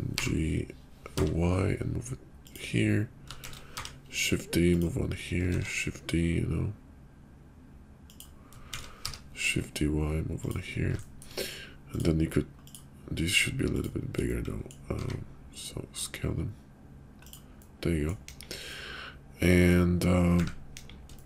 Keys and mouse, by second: 0.0 g, 3.4 shift+d, 5.4 shift+d, 8.7 shift+d, 11.1 shift+click, 12.5 click, 14.3-14.6 middle drag, 14.9 s, 17.5 middle click, 18.3 KP_5, 18.7-19.7 middle drag, 20.7 KP_5, 21.1 shift+middle drag.